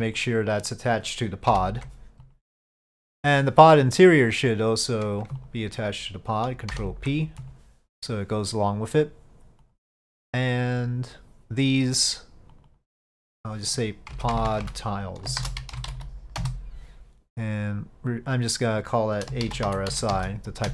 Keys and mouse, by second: 0.3 ctrl+click, 1.6 ctrl+p, 5.5-6.8 ctrl+drag, 6.8 ctrl+p, 9.0 click, 9.7 click, 12.6 click, 14.4-17.2 drag, 14.4 BackSpace, 17.8 click, 18.4 click, 18.6-20.7 drag.